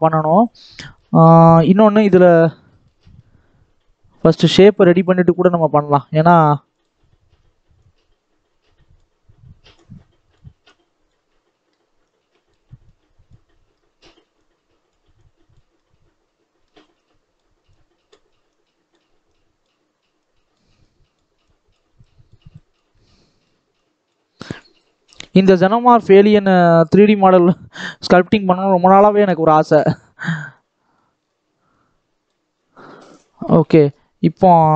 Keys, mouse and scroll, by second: 0.0-1.5 shift+middle drag, 1.5 scroll up 1, 1.8-5.5 middle drag, 5.5-11.2 drag, 11.2 middle click, 12.1-13.6 drag, 13.6 middle click, 14.4-15.7 drag, 15.7-17.1 middle drag, 17.1-22.9 drag, 22.9-23.9 middle drag, 23.9-25.4 drag, 25.4-26.4 middle drag, 26.4 click, 26.7 middle click, 27.4 click, 27.9 scroll down 1, 28.1-29.2 middle drag, 29.2 click, 29.5-30.6 middle drag, 30.6 click, 31.1-31.6 scroll up 1, 31.6 scroll up 1, 31.8 click, 32.3-32.8 scroll down 5, 32.8-33.3 scroll up 1, 33.3-34.7 scroll up 1.